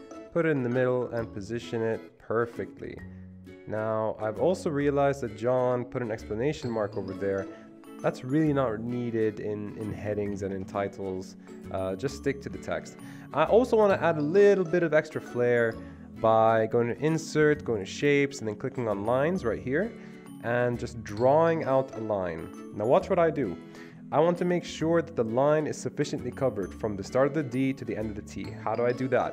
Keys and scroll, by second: 1.4-2.1 typing, 9.9 BackSpace, 10.4 Escape, 10.5 Escape, 12.8 Escape, 13.0 Escape.